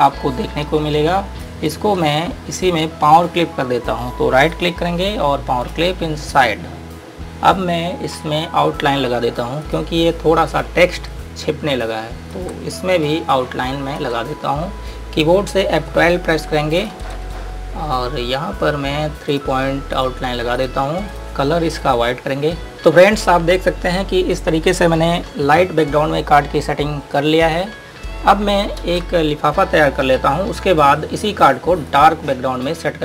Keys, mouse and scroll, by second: 1.7 click, 4.8 right click, 5.9 click, 8.8 scroll up 1, 9.8 click, 12.0 click, 13.6 click, 16.0 F12, 17.0 click, 28.9 ctrl+Num_Lock, 29.1 space, 32.0 click.